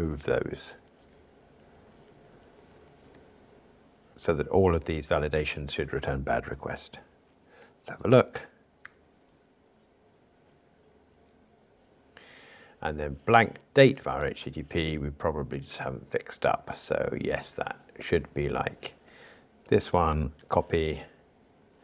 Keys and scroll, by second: 9.0 ctrl+r, 20.4 super+c.